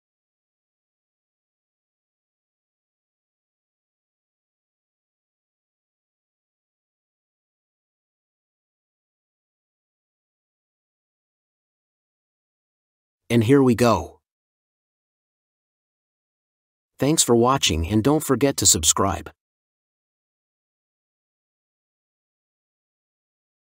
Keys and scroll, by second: 0.0-1.3 typing, 6.0 ctrl+t, 7.3 ctrl+z, 10.1 Left, 10.5 Up, 10.7 Return.